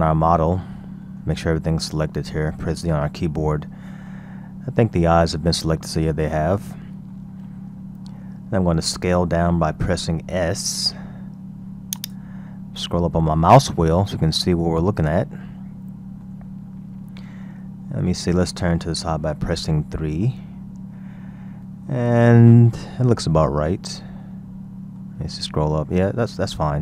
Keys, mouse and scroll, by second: 0.3-1.4 shift+middle drag, 1.4-2.1 scroll up 3, 2.1-2.9 shift+middle drag, 2.9 z, 3.3-4.6 scroll up 12, 4.6 scroll down 1, 4.9 shift+middle click, 5.7-6.7 scroll down 13, 6.7-8.4 shift+middle drag, 8.4-8.7 scroll up 2, 9.4 s, 12.4-13.2 scroll up 4, 13.2-14.6 shift+middle drag, 14.6-15.5 scroll up 9, 15.5-16.6 shift+middle drag, 16.6-17.2 scroll down 1, 17.2-20.1 shift+middle drag, 20.1 KP_3, 21.1-22.2 scroll down 1, 22.2-23.7 shift+middle drag, 23.7-24.2 scroll up 4, 24.2-25.3 shift+middle drag, 25.3-25.8 scroll up 2, 25.8 scroll down 2.